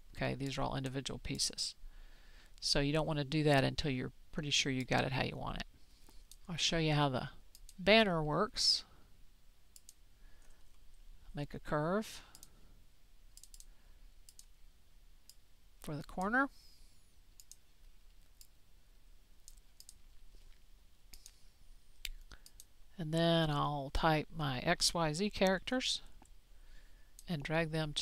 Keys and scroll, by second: 25.0-27.0 typing.